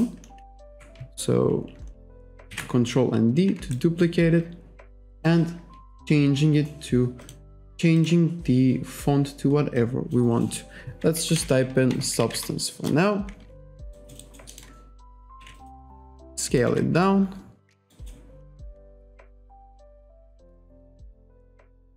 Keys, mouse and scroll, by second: 2.6 ctrl+d, 3.8 alt+right click, 5.2 click, 5.9-6.3 scroll down 1, 6.6-7.0 scroll down 1, 7.2 click, 8.0 click, 8.7-9.1 scroll down 1, 9.8 click, 10.9-12.9 typing, 14.0 alt+right click, 14.6 alt+middle click, 15.4 r, 15.8 click, 16.7 w, 17.1 click, 18.0 alt+right click, 18.9 click, 19.7 click, 20.8 r, 21.1 click.